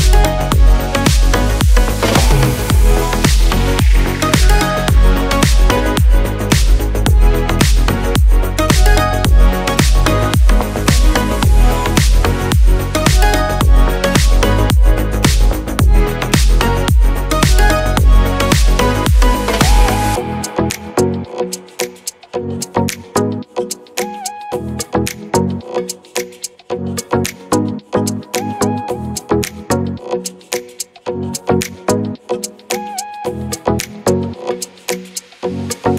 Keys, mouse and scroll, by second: 12.2 click, 12.2 click, 17.5 click, 18.4-19.7 scroll down 1, 19.7-29.7 drag, 33.9-35.9 drag.